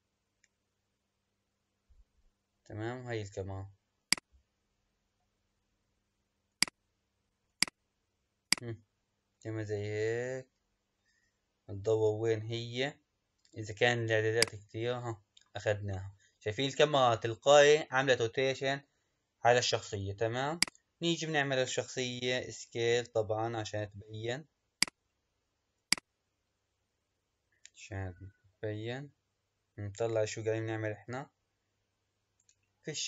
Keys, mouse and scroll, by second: 0.0-1.3 scroll up 23, 1.9-2.2 scroll up 9, 2.2-3.3 scroll down 6, 4.0 click, 4.6-5.0 scroll down 2, 6.5 click, 8.5-11.5 drag, 20.6 click, 22.2 s, 25.8 click.